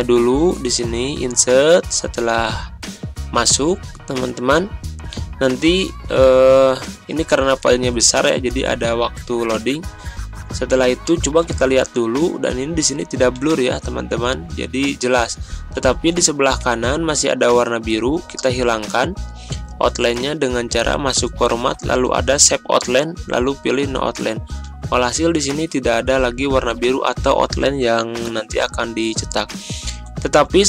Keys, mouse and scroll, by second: 11.6 ctrl+scroll up 1, 12.1 ctrl+scroll up 1, 12.6 ctrl+scroll up 1, 15.8 ctrl+scroll up 1, 18.9 ctrl+scroll down 1, 21.2 click, 24.9 ctrl+scroll up 1, 30.0 click.